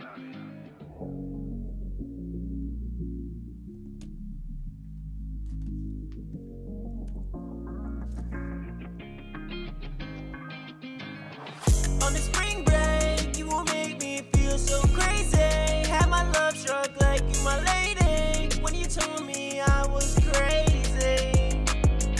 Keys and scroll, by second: 7.0 super+Tab, 14.0 super+Tab, 15.0 super+`, 20.5 ctrl+super+w.